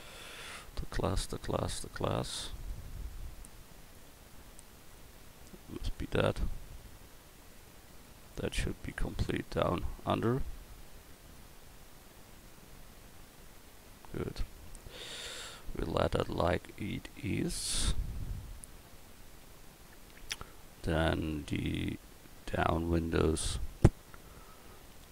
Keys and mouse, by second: 2.6 right click, 8.0 click, 9.1 click, 10.2 Tab, 11.6 click, 14.4 Tab, 15.1 Tab, 18.7 a.